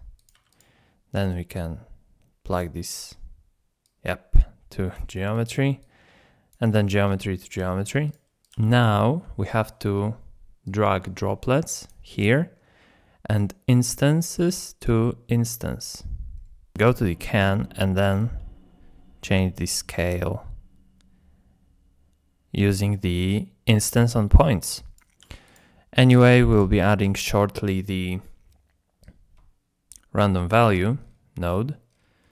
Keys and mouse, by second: 0.2 click, 0.4 g, 1.3-2.7 drag, 3.8 click, 4.0 click, 5.8 click, 6.0 click, 7.2 drag, 7.6 g, 8.4 click, 8.5 g, 10.7 click, 13.3-15.0 drag, 16.7 Tab, 18.2-23.7 shift+drag, 24.6 click, 25.2 g, 26.1 click, 26.3 g, 29.0-30.6 drag, 31.4 middle click, 32.2 middle drag.